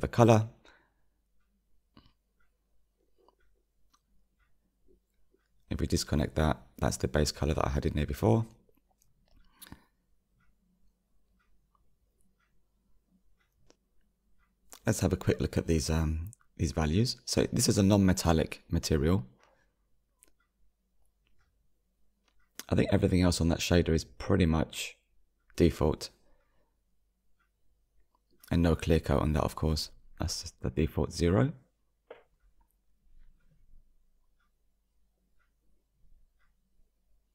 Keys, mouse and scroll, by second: 4.3-5.7 shift+middle drag, 5.7-6.3 drag, 8.3-9.0 drag, 9.6-11.3 middle drag, 11.3-11.8 scroll down 3, 11.8-15.0 drag, 15.2 click, 19.4-34.7 middle drag, 34.7-35.0 drag, 35.9 click.